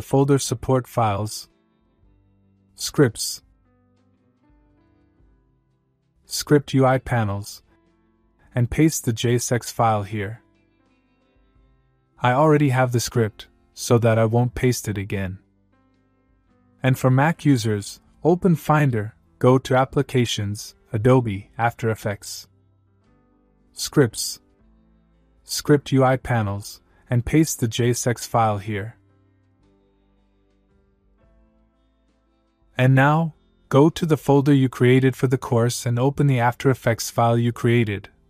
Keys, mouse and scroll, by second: 0.9 click, 3.0 scroll down 1, 4.7 click, 6.6 click, 9.3 click, 9.4 right click, 11.3 click, 14.3 click, 36.0 scroll up 1, 37.1 click.